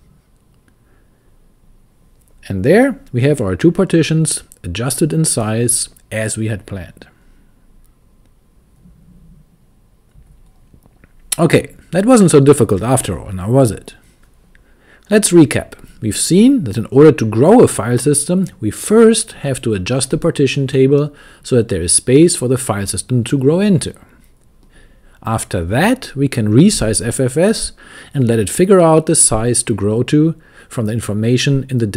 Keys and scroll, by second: 0.0-1.1 typing, 3.4-4.1 typing.